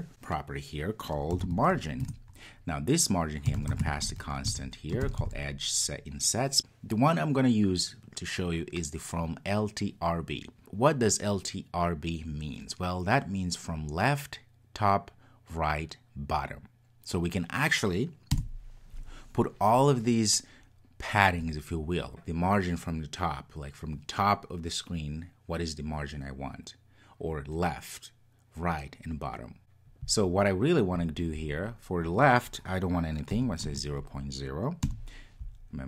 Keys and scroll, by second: 2.0 Return, 18.4 Return.